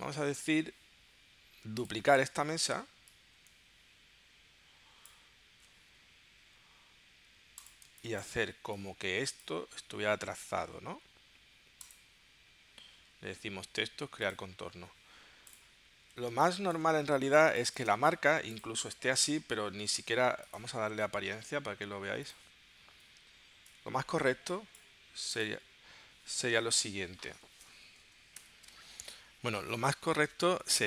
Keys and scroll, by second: 7.4 v, 7.8 space, 16.4 space, 17.4 space, 28.3 shift+super+p.